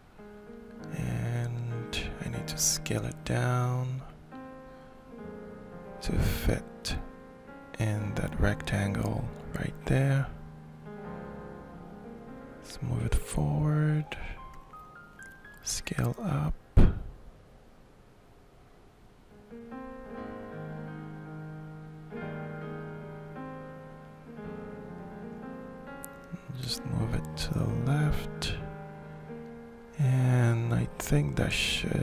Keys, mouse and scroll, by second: 1.7 ctrl+shift+middle click, 3.2 ctrl+shift+middle click, 5.1-6.8 drag, 7.2-8.3 drag, 9.4-10.7 ctrl+shift+middle drag, 11.2-13.2 drag, 14.1 shift+middle click, 15.3-22.9 drag, 23.4-24.6 shift+middle drag, 25.7-32.0 middle drag.